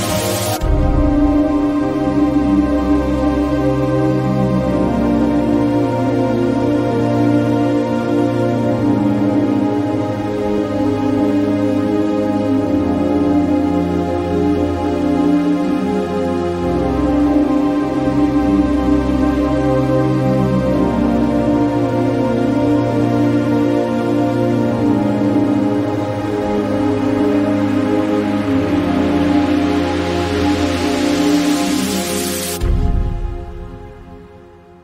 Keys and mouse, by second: 2.4 click, 3.6 shift+middle click, 5.5-6.6 drag, 9.2 click, 9.6-13.4 drag, 14.7 click, 16.2 click, 17.2-20.5 drag, 21.5 click, 23.1 click, 24.5 click, 29.3 click, 30.9 click, 34.0 click.